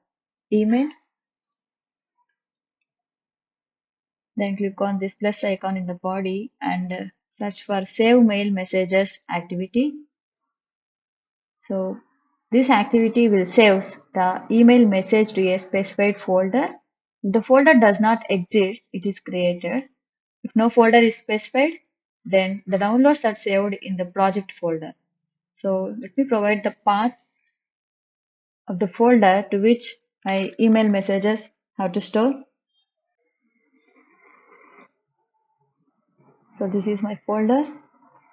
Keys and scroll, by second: 0.8-3.0 typing, 7.0 s, 27.3 shift+'.